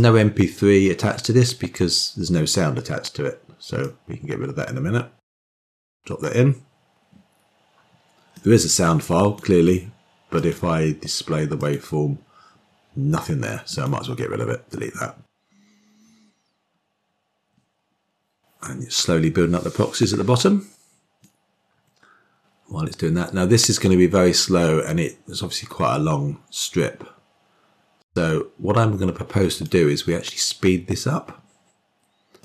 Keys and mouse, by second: 8.3-9.3 drag, 10.3 click, 11.5 click, 13.6 click, 14.7 typing, 21.4-29.7 drag, 32.3-32.4 drag.